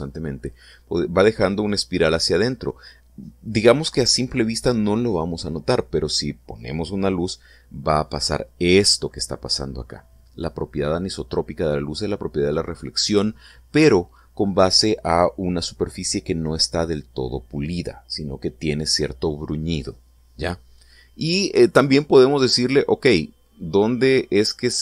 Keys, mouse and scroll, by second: 23.3-24.8 drag.